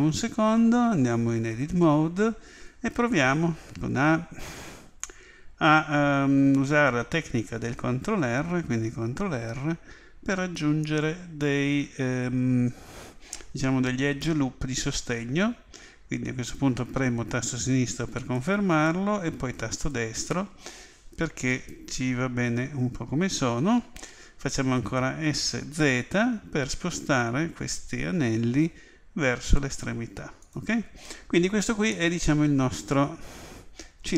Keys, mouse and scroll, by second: 1.4 Tab, 3.1 a, 9.1 ctrl+r, 25.2 s, 31.9-34.1 middle drag.